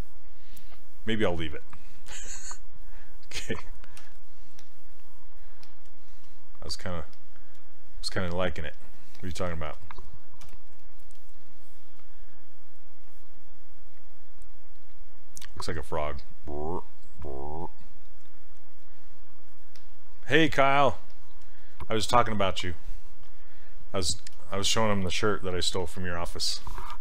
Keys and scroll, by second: 4.0 q, 10.5 w.